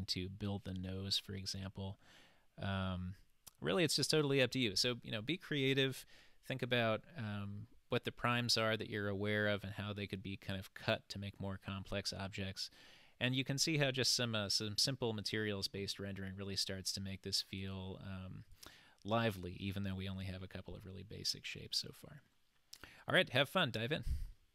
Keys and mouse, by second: 1.6-3.8 middle drag, 14.4-15.3 middle drag, 17.5 click, 18.6 click.